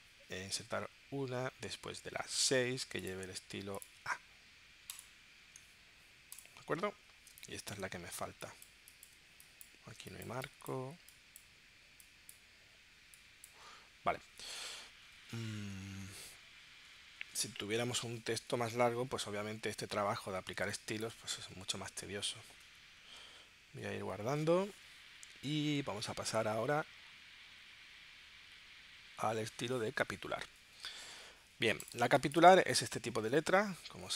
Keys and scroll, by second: 7.3 space, 8.2 space, 10.0 space, 20.8 space, 32.0 space, 32.6 super+Tab.